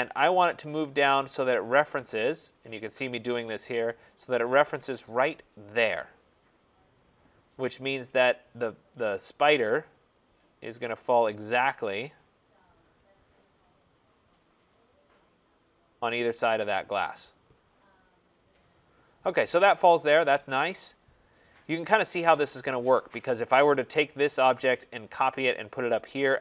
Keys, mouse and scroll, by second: 6.8 click, 8.0 click, 11.7 right click, 12.2-12.9 scroll, 17.6 right click, 17.9-18.4 scroll, 20.8 right click, 21.4-23.4 scroll.